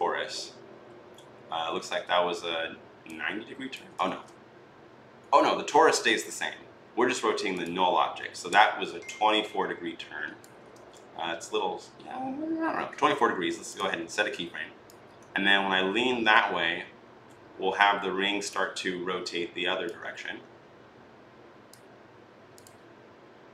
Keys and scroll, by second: 3.8 ctrl+z, 10.5 ctrl+z.